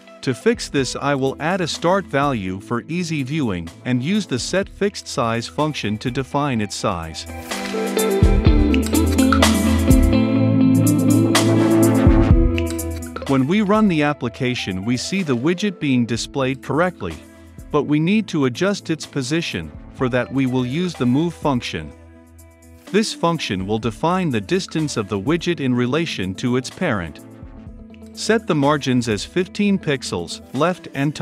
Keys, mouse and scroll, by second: 2.7-3.7 typing, 4.1-5.1 drag, 5.0-13.1 typing, 6.6 Down, 6.7 Return, 9.4 Return, 14.2 click, 14.8 ctrl+F5, 19.8 click, 20.8 Return, 21.5 Tab, 22.9 ctrl+F5, 25.3-26.6 drag, 26.6 Tab, 26.9 Return, 27.2 click, 27.4 ctrl+s, 27.6 ctrl+F5, 31.0-31.2 drag.